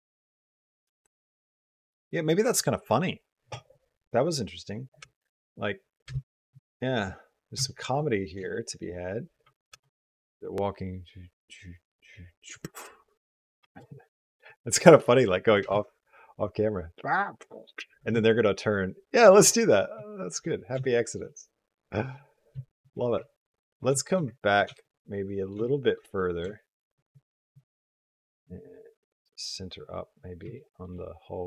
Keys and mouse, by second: 1.7 space, 4.1 click, 4.9 space, 6.3 shift+space, 6.5 shift+middle click, 7.5 shift+middle click, 7.8 middle click, 8.4 shift+middle click, 9.1 space, 10.3 space, 13.4 space, 15.4 click, 15.5 space, 17.8 space, 19.9 shift+click, 20.7 shift+click, 21.1 click, 22.5 shift+click, 23.1 ctrl+click, 23.8 shift+click, 24.2 ctrl+click, 24.6 shift+click, 25.0 middle click, 25.5 shift+middle click, 26.1 middle click, 26.4 shift+middle click, 27.5 shift+middle click, 27.9-30.2 middle drag, 30.4 shift+middle click, 30.8-31.4 middle drag.